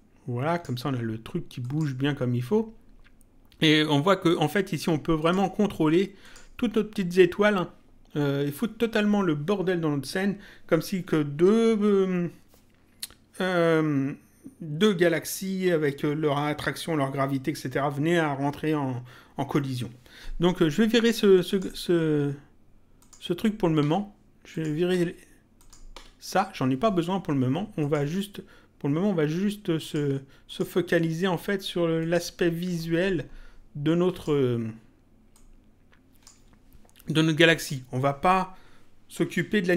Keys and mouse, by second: 1.6 click, 5.1 click, 21.4 click, 23.0 click, 23.8 Delete, 24.5 click, 24.9 Delete, 25.6 click, 25.9 Delete, 27.8 click, 29.8 click, 32.0 click, 34.0 click, 35.3 click, 37.5 click.